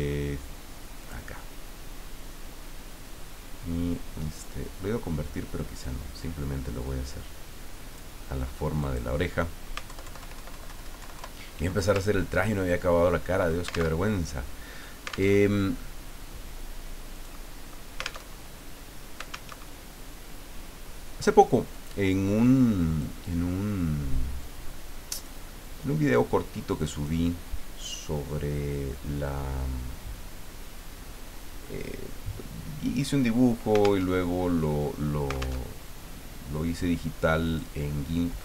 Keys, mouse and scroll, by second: 1.0 click, 4.4-8.6 drag, 8.8 click, 9.9 alt+Left, 12.5 ctrl+scroll down 2, 13.1 ctrl+click, 13.3 middle click, 13.4 alt+click, 13.9 alt+Tab, 15.3 alt+Tab, 17.3 click, 18.3 alt+Tab, 19.5 alt+Tab, 21.7 click, 22.5 click, 24.4 click, 26.8 click, 34.1 alt+Tab, 35.6 alt+Tab, 37.4 click.